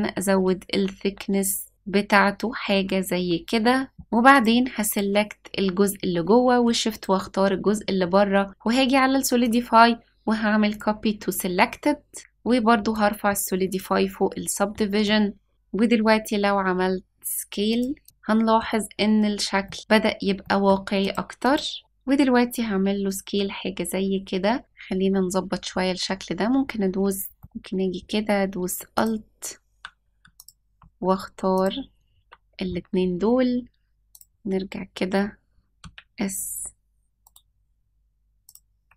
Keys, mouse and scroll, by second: 3.9 middle click, 3.9-4.3 scroll up 1, 4.3 click, 4.8 click, 6.9 shift+click, 9.4-10.8 drag, 12.2 click, 12.9-13.7 drag, 15.0-15.5 middle drag, 15.5 s, 18.0 click, 18.0-18.6 middle drag, 18.0-18.6 scroll down 2, 18.9-19.4 scroll down 1, 19.6 middle click, 19.9-20.4 scroll up 3, 20.4 middle drag, 21.0 click, 21.4 click, 21.8 s, 24.2 l, 24.2 s, 24.6 Tab, 24.6 middle click, 24.6 click, 24.6-25.4 scroll up 2, 27.4 middle click, 27.4 click, 28.9 alt+click, 30.3 alt+click, 31.5 alt+shift+click, 34.2 click, 35.8 s, 36.5 s, 38.4 click, 38.8 s.